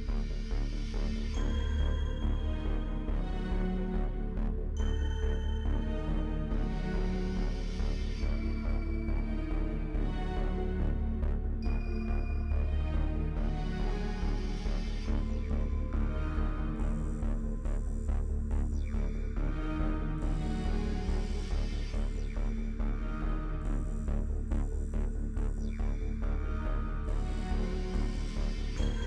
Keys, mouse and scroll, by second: 0.5 ctrl+z, 0.9 shift+click, 1.7 middle click, 2.1 shift+click, 3.0 shift+click, 3.2 middle click, 4.0 shift+click, 4.7 shift+middle click, 5.4 shift+click, 5.8 shift+click, 5.9 middle click, 6.2 shift+click, 6.4 middle click, 6.7 shift+click, 7.1 middle click, 7.3 scroll down 1, 7.5 shift+middle click, 8.0 shift+click, 8.6 shift+click, 9.5 middle click, 9.9-11.6 shift+drag, 11.6 middle click, 12.6-14.1 shift+drag, 14.4-16.9 drag, 17.0 click, 17.2 scroll down 2, 17.4 middle click, 17.9-18.4 scroll up 3, 18.1 shift+middle click, 18.4-19.8 middle drag, 19.8 shift+click, 20.4 shift+click, 21.1 middle click, 21.4 shift+click, 22.1 shift+middle click, 22.8 shift+click, 23.6 middle click, 24.0-25.0 shift+drag, 25.1 shift+click, 25.5 middle click, 26.1-27.1 shift+drag, 27.1 shift+middle click, 27.4-29.0 shift+drag.